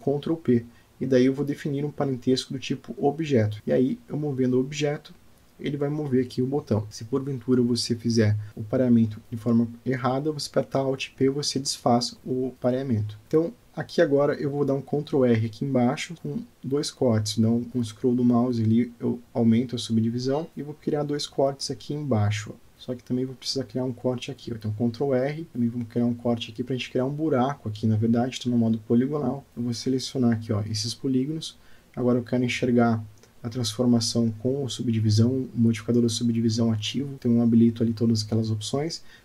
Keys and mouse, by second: 2.1 click, 2.6 click, 3.5 g, 6.9 g, 7.3 click, 8.3-10.3 middle drag, 10.6 alt+middle click, 12.0 click, 12.6 Tab, 13.3 click, 15.1 ctrl+r, 17.2 ctrl+z, 17.2 ctrl+r, 23.7 ctrl+r, 26.6 Return, 27.5 click, 30.4 click, 31.3 click, 32.7 Tab, 33.8 click, 34.2 click, 34.4 Tab, 35.1 Tab, 35.4 Tab.